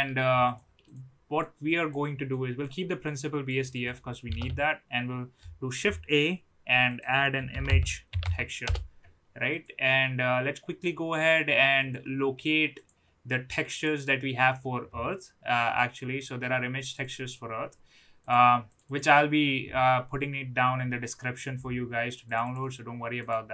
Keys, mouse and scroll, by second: 0.5 click, 0.8 drag, 1.3-2.0 drag, 2.3 click, 3.0-3.5 drag, 3.8 click, 4.4 shift+a, 11.8 click.